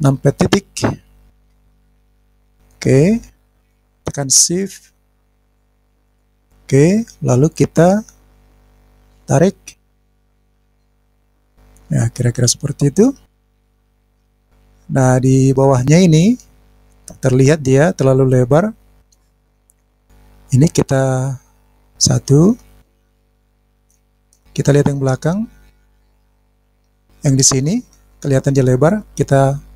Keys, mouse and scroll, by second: 0.4 KP_Decimal, 1.4-1.9 scroll down 6, 1.9 scroll up 1, 2.0-2.4 scroll down 3, 3.4 click, 5.2 shift+click, 6.0 shift+click, 9.2 click, 11.2 click, 11.5-12.1 scroll down 1, 12.1-16.0 middle drag, 19.3 scroll down 1, 19.5-19.9 scroll up 4, 19.8 click, 22.2 KP_1, 22.8-23.5 scroll down 6, 23.8-24.7 scroll up 3, 24.7-26.0 middle drag, 26.1 scroll up 1, 26.2 scroll down 2, 26.8 click, 26.9 scroll down 1, 26.9 middle click.